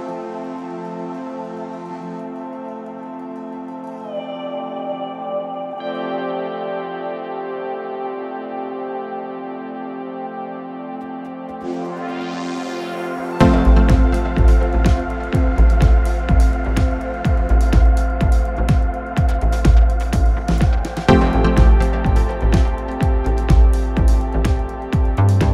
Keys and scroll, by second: 6.0 ctrl+d, 6.2 Escape, 12.1 ., 16.1 ctrl+F2.